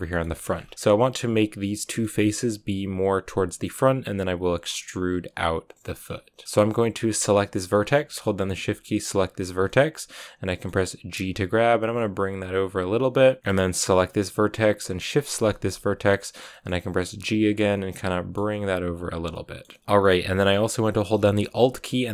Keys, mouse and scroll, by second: 0.3 scroll up 7, 1.8-3.2 shift+middle drag, 3.2 scroll down 3, 3.4-5.9 middle drag, 5.9-7.2 scroll up 2, 7.2 right click, 7.4-8.0 scroll down 2, 8.0-9.1 shift+middle drag, 9.1 shift+right click, 9.6-11.1 middle drag, 11.1 g, 13.4 middle click, 14.0 right click, 14.2 middle click, 15.1 shift+right click, 15.3-16.3 middle drag, 16.3 scroll up 1, 16.4 middle click, 16.8 g, 17.5 scroll down 1, 17.6 middle click, 18.5 g, 19.2-22.1 middle drag.